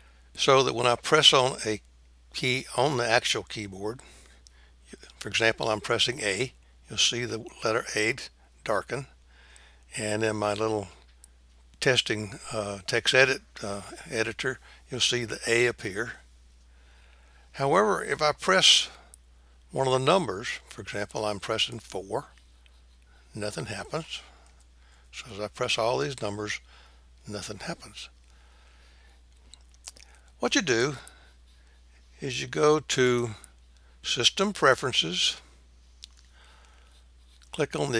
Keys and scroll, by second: 7.1 a, 27.8 BackSpace.